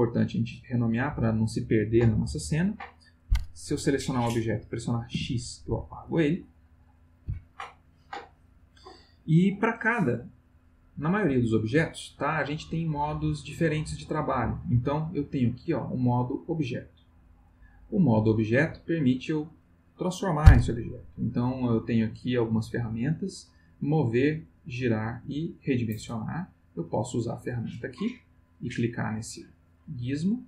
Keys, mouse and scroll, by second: 3.9 click, 5.1 x, 6.0 click, 7.0 click, 13.4 middle click, 27.0 click, 28.3-29.0 drag.